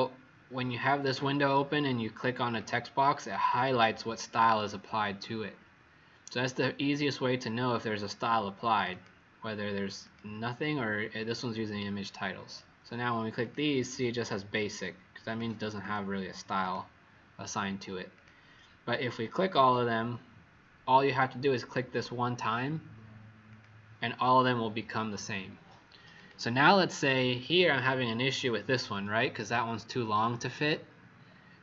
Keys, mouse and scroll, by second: 2.5 click, 15.8 click, 16.6 click.